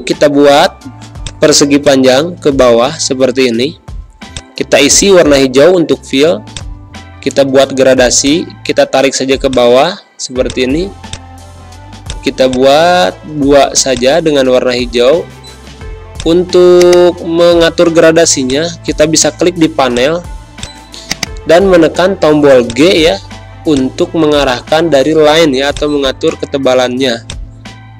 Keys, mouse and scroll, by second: 1.6 space, 1.8 click, 2.1 space, 4.2 click, 13.4 g, 13.9-27.9 drag.